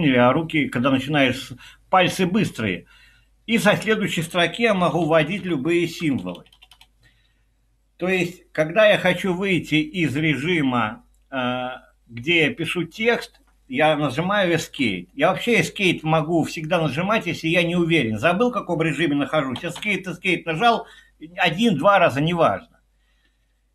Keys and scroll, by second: 4.9-5.4 typing, 6.7 BackSpace, 14.6 Escape, 19.6 Escape, 19.8 Escape.